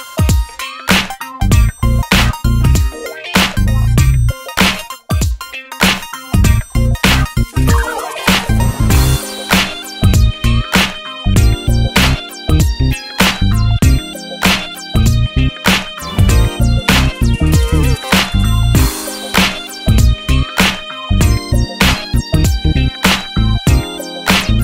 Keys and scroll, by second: 8.0 super+c, 8.2 super+v, 16.2 super+c, 16.4 super+v.